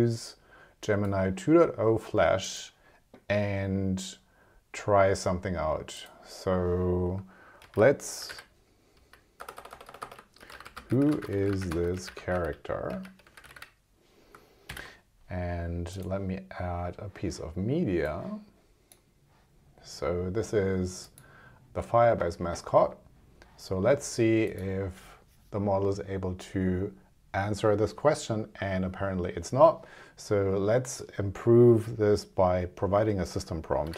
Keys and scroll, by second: 9.0 ', 9.6 BackSpace, 10.8 space, 13.4 r, 14.7 shift+?.